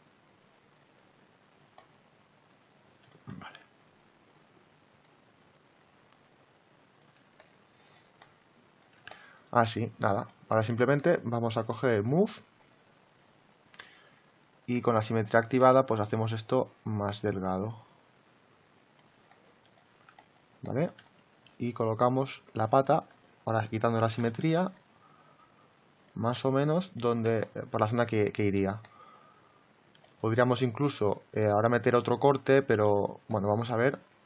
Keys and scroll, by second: 24.1 x.